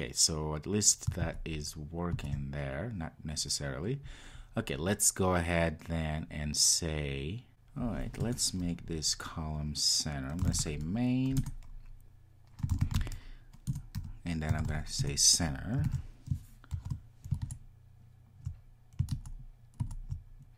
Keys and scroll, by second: 11.4 Return, 15.9 super+s, 16.9 ctrl+r.